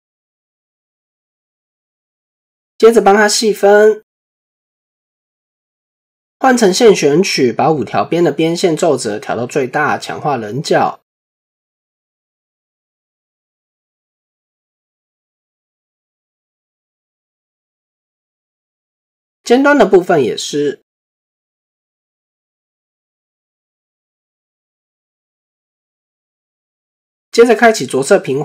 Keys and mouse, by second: 0.3 shift+middle click, 0.7 Tab, 1.7 shift+middle click, 3.9 ctrl+2, 4.8 Tab, 5.4 shift+middle click, 6.8 2, 7.4 alt+click, 8.3 middle click, 9.9 middle click, 11.4-13.0 middle drag, 14.4 middle click, 15.9 click, 16.6 click, 17.5-18.0 middle drag, 20.1 alt+click, 21.4 click, 22.3 Tab, 23.5 shift+middle click, 24.7-25.1 shift+middle drag, 26.4 shift+middle click, 27.5-28.4 right drag.